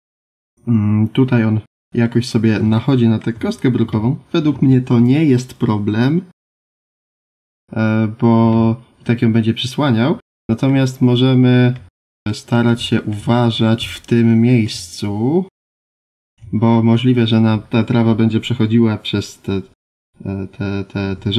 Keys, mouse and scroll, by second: 1.2 middle click, 2.2 scroll up 3, 2.7 shift+middle click, 10.1 middle click.